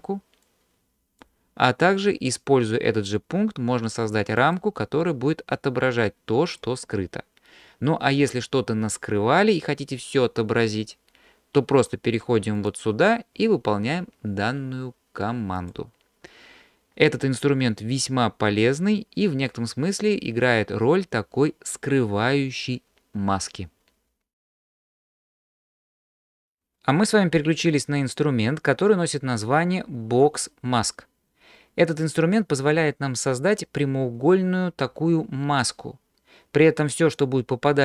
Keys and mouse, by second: 3.0-6.6 drag, 12.8-15.8 drag.